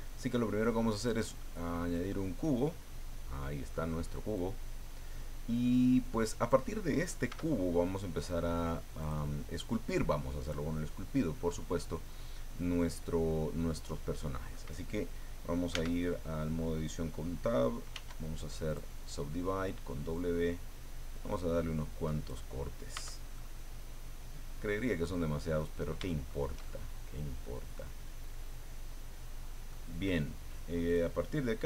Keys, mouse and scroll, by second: 1.0 click, 2.1-3.9 middle drag, 3.9-4.3 scroll up 2, 4.3-6.7 drag, 7.3 s, 9.0 click, 9.8 click, 11.8-14.7 middle drag, 15.7 Tab, 17.9 w, 18.7 click, 20.1-22.4 drag, 22.9 Tab, 23.3-25.1 drag, 25.1-25.4 scroll up 1, 25.6-29.9 drag, 30.9 click.